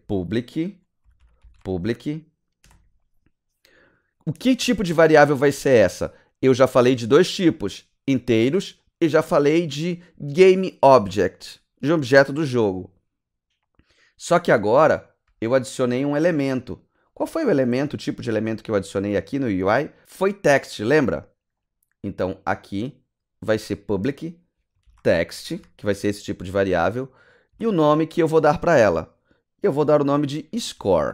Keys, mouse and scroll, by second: 0.0-2.6 typing, 16.9 click, 18.6-19.2 scroll down 5, 22.5 click, 24.6-26.1 typing, 27.5 space, 29.9-31.1 typing.